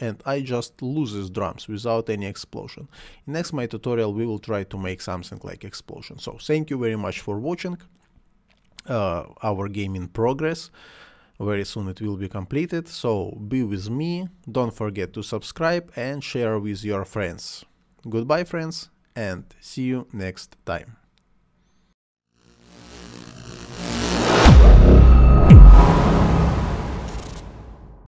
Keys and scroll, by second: 2.9 space, 5.0 space, 6.2 space, 10.2 space, 13.7 space, 16.7 space, 18.3 space.